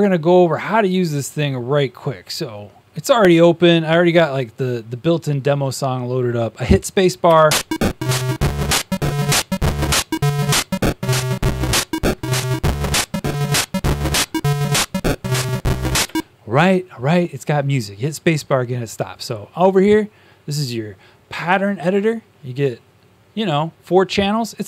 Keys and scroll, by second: 16.0 space.